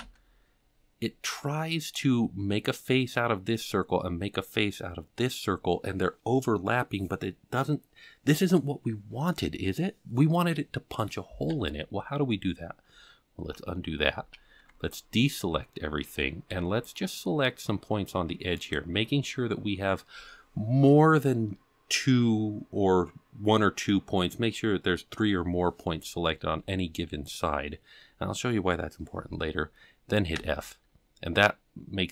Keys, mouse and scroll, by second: 0.0 f, 1.3 middle click, 13.4 ctrl+z, 14.3 alt+a, 15.4 middle click, 16.4 c, 18.9-19.5 scroll up 3, 30.3 f.